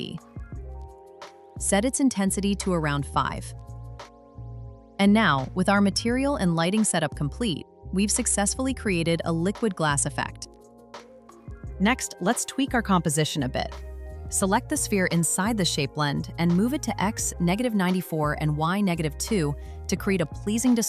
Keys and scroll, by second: 0.1 Return, 4.3 Return, 11.8 super+z.